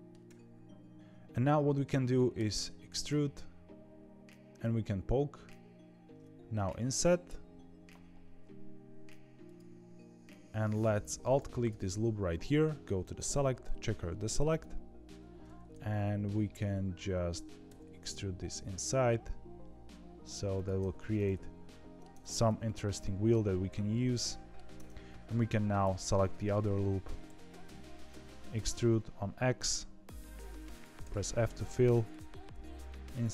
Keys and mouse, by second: 2.3 e, 11.2 alt+click, 13.1-14.5 drag, 15.6 middle click, 17.6 e, 20.7 z, 21.1 middle click, 22.1 Tab, 22.6 middle click, 23.9 middle click, 24.7 Tab, 25.0 2, 25.4 alt+click, 26.4 KP_1, 27.0 e, 31.3 middle click, 32.3 i.